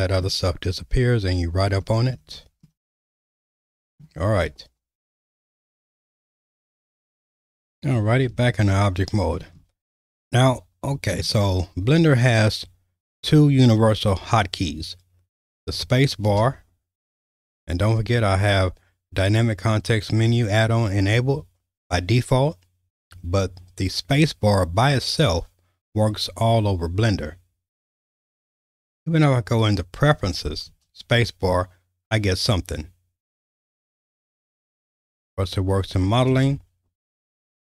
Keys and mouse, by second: 0.7 /, 3.1 middle click, 6.6 alt+/, 8.3 Tab, 10.2-11.2 shift+middle drag, 16.3 space, 30.7 space, 35.3-36.3 drag, 36.3 space.